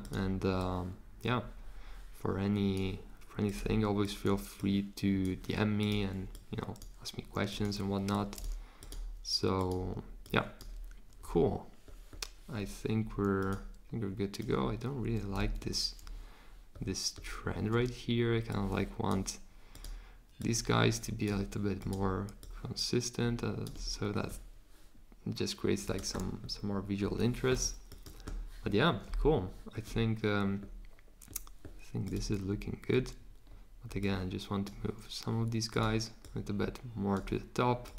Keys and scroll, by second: 15.3 super+z.